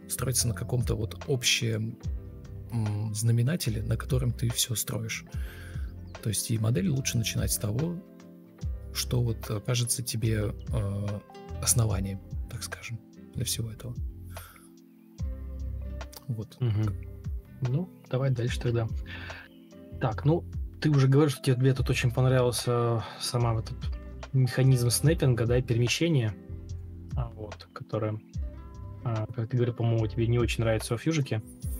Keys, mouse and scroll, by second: 0.3 ctrl+d, 2.0 ctrl+d, 3.4 ctrl+z, 6.7 ctrl+c, 6.8 ctrl+d, 7.6 ctrl+shift+v, 8.5 Escape, 8.8 shift+t, 9.4 Escape, 9.9 ctrl+space, 10.7 ctrl+u, 11.2 Down, 11.9 Up, 12.0 Up, 12.3 shift+Down, 12.5 space, 15.6 Delete, 16.0 ctrl+v, 16.1 ctrl+z, 18.3 ctrl+z, 18.8 ctrl+space, 21.6 ctrl+space, 22.4 Delete, 23.0 Right, 23.0 Left, 23.1 Up, 23.2 Down, 26.2 ctrl+space, 28.2 Escape, 29.0 ctrl+space, 29.7 Escape.